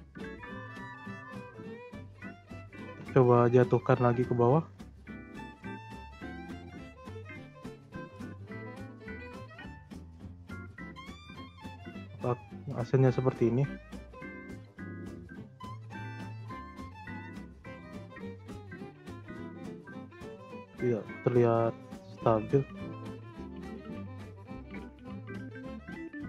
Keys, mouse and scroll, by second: 6.2 click, 6.7-7.3 drag, 7.3 space, 9.9 space, 10.2 click, 11.0 space, 13.3 space, 13.7-14.4 drag, 14.4 space, 15.3 space, 15.9 click, 16.4 Delete, 17.3-18.0 drag, 18.0 space, 19.7 space, 20.1 ctrl+z, 20.6 ctrl+z, 21.7 click, 22.9 Delete, 23.3-25.2 drag, 25.6 click.